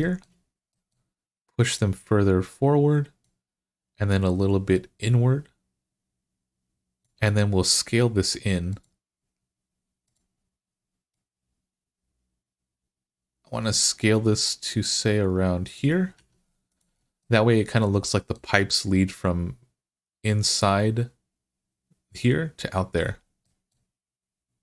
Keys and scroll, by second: 16.0 Tab.